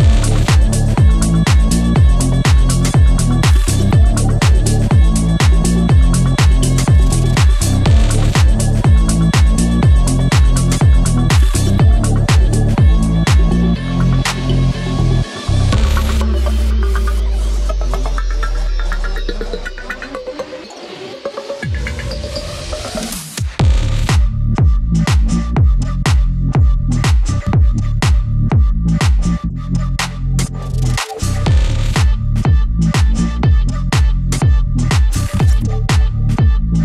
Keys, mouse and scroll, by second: 0.1-1.8 alt+drag, 1.8-2.3 scroll down 1, 2.3 click, 2.7 ctrl+z, 3.7 click, 3.9 scroll up 1, 4.3 shift+click, 7.2 scroll down 1, 7.8 click, 8.7 scroll up 1, 9.0 shift+click, 9.9 scroll down 1, 10.4 scroll up 1, 10.7 click, 11.0-11.5 scroll down 1, 11.5 click, 11.7 scroll up 1, 11.9 shift+click, 14.4-14.7 scroll down 1, 14.7 click, 16.2 scroll down 1, 16.6 scroll up 1, 16.9 click, 17.1 scroll up 1, 19.3 scroll up 1, 20.0 scroll down 1, 20.9 scroll up 1, 23.1 scroll down 1, 23.9 click, 24.3-25.3 scroll up 1, 25.3 click, 25.9 scroll down 1, 26.9-27.3 scroll up 1, 27.5 scroll down 1, 28.1 click, 28.6 ctrl+a, 28.8 shift+F2, 29.5 scroll down 1, 29.9-31.3 drag, 31.3 click, 32.5 scroll up 1, 33.1-34.9 shift+drag, 34.9 ctrl+s.